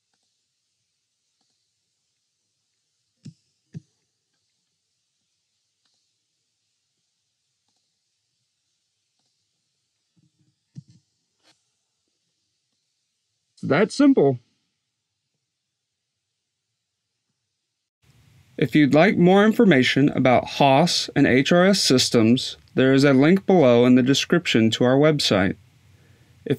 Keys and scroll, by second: 3.0 5, 3.5 8, 10.0 2, 10.2 1, 10.6 0.